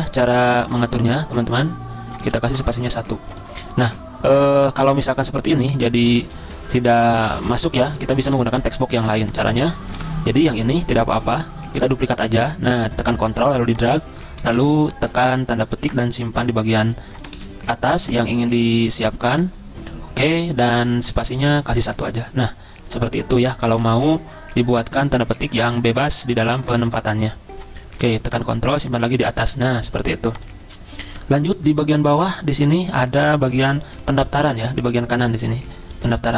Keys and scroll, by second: 4.9 ctrl+z, 6.2 ctrl+z, 8.3 Delete, 10.0 Delete, 13.9 ctrl+a, 14.6 typing, 17.3 ctrl+a.